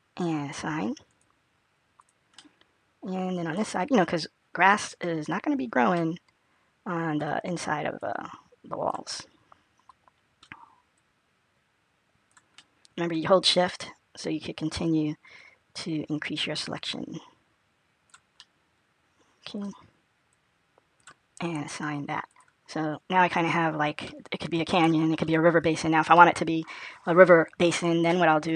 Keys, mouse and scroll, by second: 0.9 click, 2.2 click, 2.2 middle click, 3.6-4.2 scroll down 1, 4.3 scroll up 1, 5.9 middle click, 7.9 click, 9.0 middle click, 10.8 click, 12.5 middle click, 14.1 shift+click, 18.2 middle click, 20.2 shift+click, 22.1 click, 22.7-23.9 scroll down 3, 23.2 click, 23.9 middle click, 26.0 middle click.